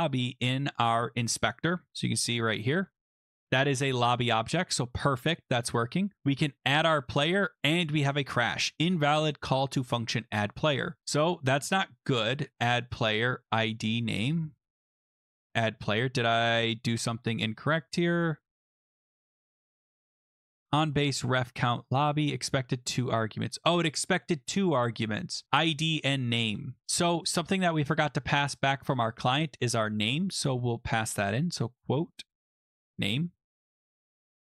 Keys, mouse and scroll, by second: 0.7 click, 3.2 click, 6.2 click, 11.6 click, 12.6 click, 12.7 click, 13.7 click, 15.4 click, 16.8 ctrl+c, 17.7 click, 18.6 click, 18.7 click, 18.8 ctrl+v, 19.1 click, 19.1 click, 19.2 ctrl+v, 24.5 click, 25.9 click, 28.8 click, 30.1 click, 31.1 Return, 32.2-34.4 typing.